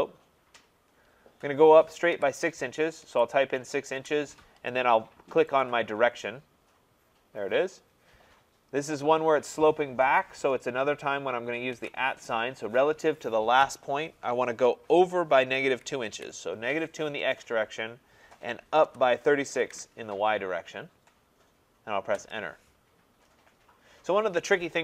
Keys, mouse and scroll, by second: 2.1 6, 3.1 shift+', 4.0 Return, 5.6-7.3 drag, 11.7 @, 15.7 -, 16.1 -, 18.9-20.2 typing, 22.2 Return.